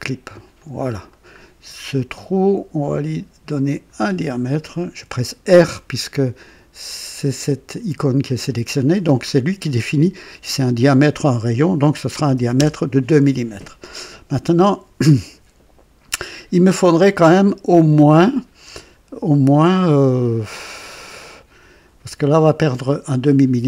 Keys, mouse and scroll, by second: 0.5 click, 1.1 right click, 2.1 right click, 3.6 click, 5.4 r, 12.2 KP_2, 12.5 Return.